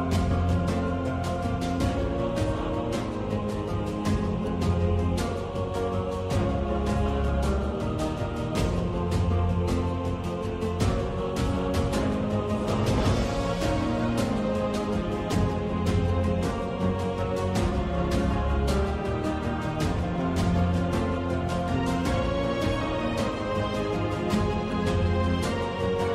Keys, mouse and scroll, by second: 2.1 shift+click, 3.3 x, 5.6 alt+click, 6.7 click, 7.9 x, 16.8 v, 23.9 alt+shift+click.